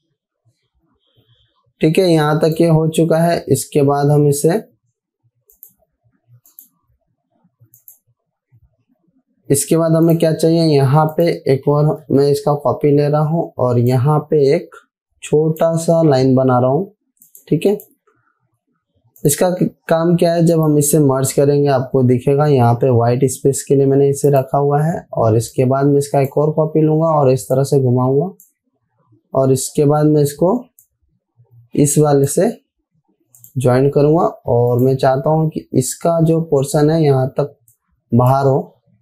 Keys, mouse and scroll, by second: 10.6 click, 12.5 ctrl+c, 14.6-16.2 drag, 24.7-26.9 drag, 31.6-32.9 drag, 36.9 alt+scroll up 2, 38.2-38.8 click.